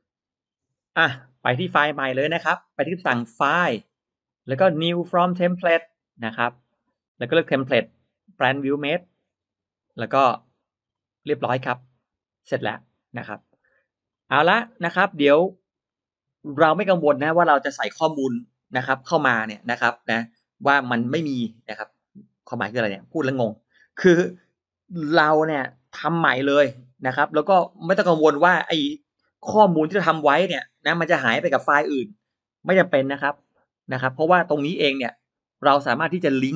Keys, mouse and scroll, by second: 3.6 click, 6.3 click, 8.8 click, 9.9 click, 11.1 middle click, 11.6 middle click, 12.1-12.5 drag, 13.2 click, 14.3 click, 15.3-15.7 scroll up 1, 15.3 middle click, 15.7 middle click, 15.9-16.5 scroll down 1.